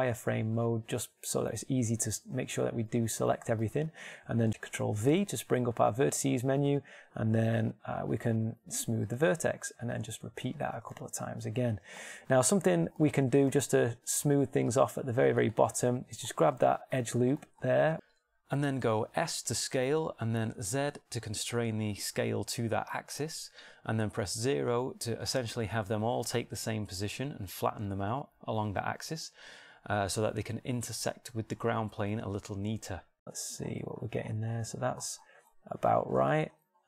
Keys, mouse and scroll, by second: 2.5 shift+middle click, 3.3-4.3 middle drag, 3.3 z, 5.3 ctrl+v, 10.8 shift+r, 11.2 shift+r, 12.5 shift+r, 14.2 ctrl+Tab, 17.1 middle click, 18.8 shift+middle click, 21.4 s.